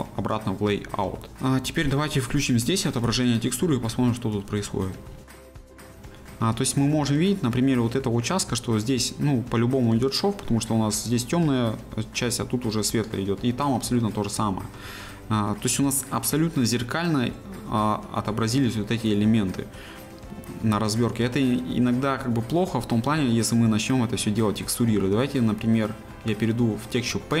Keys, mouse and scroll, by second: 0.9-4.0 middle drag, 4.0 z, 4.4 middle click, 5.2 scroll up 1, 5.3-8.5 shift+middle drag, 8.5 scroll up 1, 13.2 scroll down 1, 13.5-15.1 middle drag, 15.1-15.5 scroll up 1, 15.5-21.5 middle drag, 21.5-22.1 scroll down 1, 22.1-27.4 middle drag.